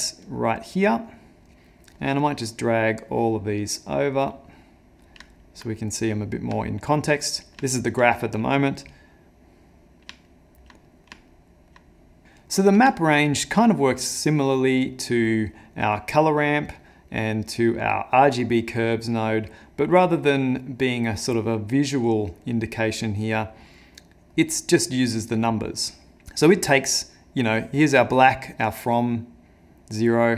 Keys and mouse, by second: 1.6 middle click, 2.2 click, 3.1 click, 4.3 middle click, 5.3 ctrl+middle click, 5.7 middle click, 6.6 ctrl+middle click, 7.2 middle click, 7.7 ctrl+middle click, 8.7 click, 9.8 click, 10.3 ctrl+middle click, 11.3 ctrl+middle click, 12.6 middle click, 13.4 middle click, 14.2 middle click, 14.4 ctrl+middle click, 15.0 middle click, 15.2 ctrl+middle click, 15.6 middle click, 16.8 middle click, 18.9 middle click, 19.6 middle click, 20.2 middle click, 22.4 middle click, 23.0 middle click, 23.8 middle click, 26.2 click.